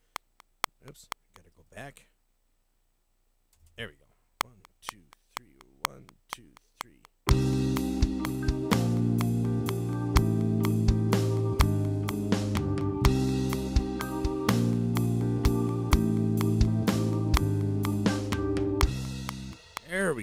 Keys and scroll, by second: 1.5 space, 3.5 0, 4.3 *, 20.1 space.